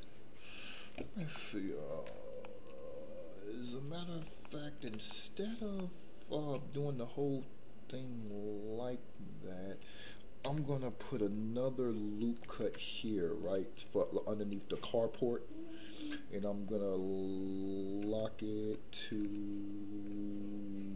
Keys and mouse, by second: 1.4 middle click, 2.4-4.2 middle drag, 4.4 shift+middle click, 5.1 middle click, 5.8 shift+middle click, 12.4 ctrl+r.